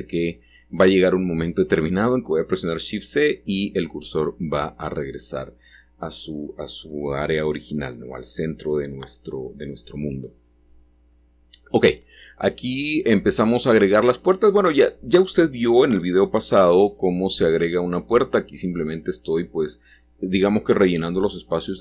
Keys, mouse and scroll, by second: 3.5 r, 9.0 Return, 10.3-11.1 scroll up 1, 18.4 x, 20.8-21.8 drag.